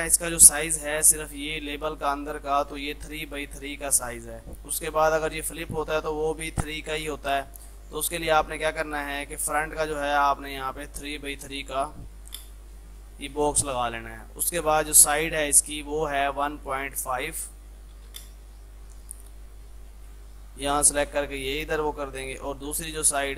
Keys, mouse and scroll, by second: 8.1-11.5 drag, 12.1 Tab, 12.9 space, 14.0-15.9 drag, 15.9-17.1 right drag, 17.1 click, 19.5-20.3 typing, 19.8-23.3 drag.